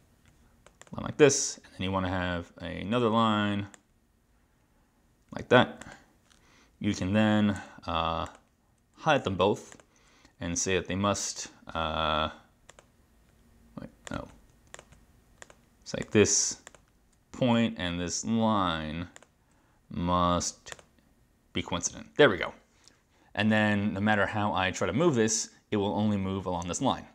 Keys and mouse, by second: 0.9 click, 3.8 click, 5.9 click, 7.6 Escape, 8.3 click, 9.8 click, 12.7 click, 14.1 click, 14.8 click, 16.1 click, 19.3 click, 20.8 click, 24.3 click.